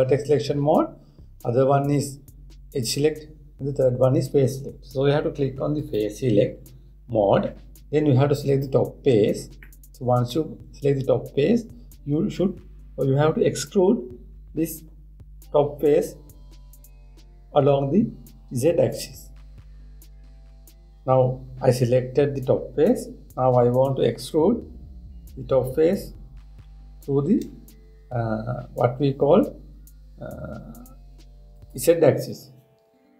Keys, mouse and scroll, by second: 6.4-9.4 drag, 10.0 scroll down 1, 10.1 scroll up 1, 10.2 scroll down 1, 10.3-11.4 middle drag, 11.4-11.9 scroll down 1, 11.9-12.8 scroll down 1, 24.8 e.